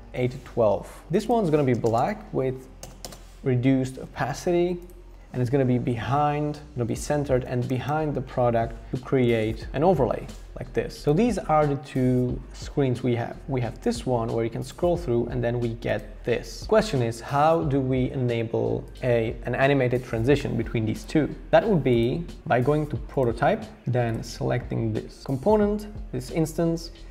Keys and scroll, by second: 1.0 Return, 1.7-3.3 typing, 1.8 Return, 4.1 super+x, 5.2 super+v, 7.7 super+[, 8.9 shift+Up, 9.0 shift+Up, 9.2 shift+Up.